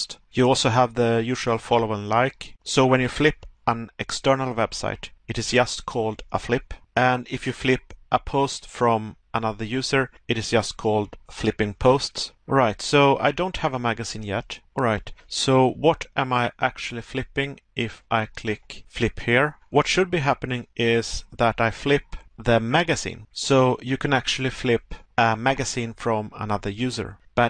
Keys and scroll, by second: 0.8 Pause, 12.0 Pause, 21.6 Pause, 23.0 Pause, 24.8 Pause.